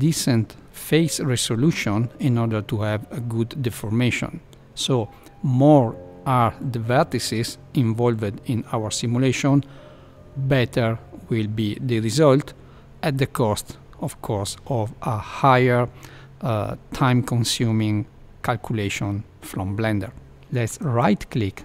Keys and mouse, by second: 4.1 Left, 4.3 middle click, 4.9 Tab, 6.4 middle click, 15.9 Left, 16.1 middle click, 16.7 Tab, 18.2 middle click, 20.3 ctrl+3, 20.8-21.6 right drag.